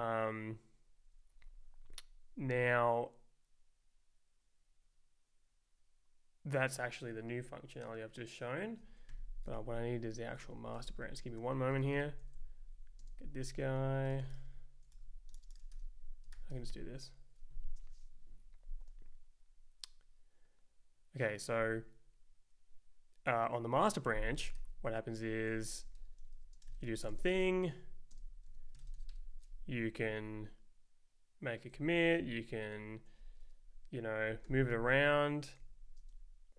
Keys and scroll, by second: 9.1 q, 10.3-11.8 typing, 11.9 Return, 12.2 Right, 12.4 Down, 13.0-16.5 typing, 16.3 ctrl+u, 16.7 Return, 24.6 ctrl+s, 25.1 Up, 25.5 Down, 25.8 super+Right, 25.9-29.6 typing, 29.9 Right, 31.7 Left, 32.2 Down, 32.8 Right, 34.4 ctrl+j, 35.6 Left, 36.0 space.